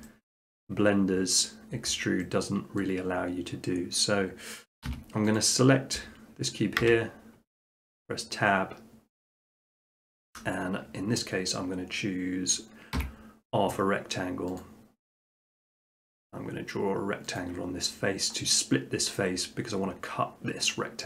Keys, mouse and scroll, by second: 0.0 scroll, 0.4 middle click, 2.8 middle click, 4.9 s, 5.4-6.5 drag, 6.8 Tab, 9.9-11.1 middle drag, 12.9 r, 14.6 click, 17.4 click, 18.4 middle click.